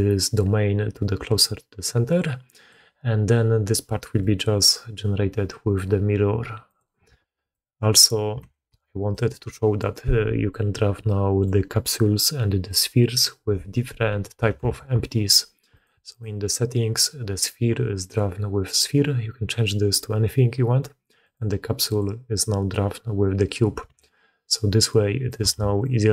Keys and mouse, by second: 4.0 d, 4.1-5.7 drag, 5.7 d, 6.7 click, 7.1 alt+a, 7.4-7.9 drag, 8.4 shift+drag, 9.0 click, 9.7 click, 10.9-11.3 middle drag, 12.6 click, 14.5 alt+a, 16.1-23.8 drag, 25.4 click.